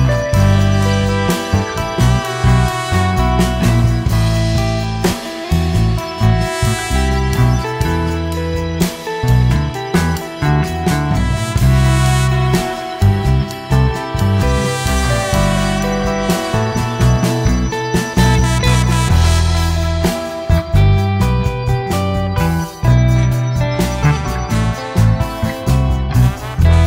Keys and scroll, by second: 5.8 ctrl+BackSpace, 14.0 ctrl+KP_Subtract, 14.1 ctrl+KP_Add.